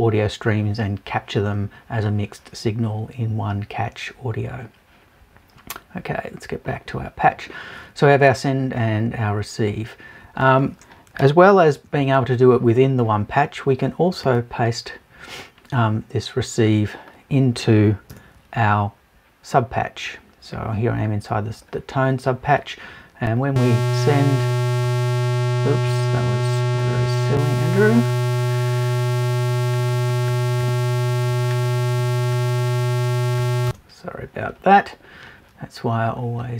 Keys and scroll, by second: 18.1 BackSpace, 30.6 Return, 33.7 super+Return.